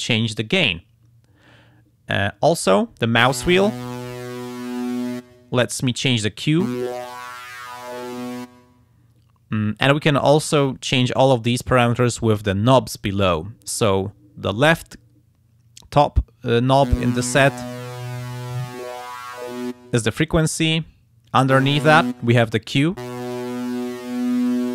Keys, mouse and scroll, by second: 3.6-5.2 scroll up 1, 5.7-8.6 drag, 17.4-19.9 drag, 23.1-24.1 drag, 24.4 click.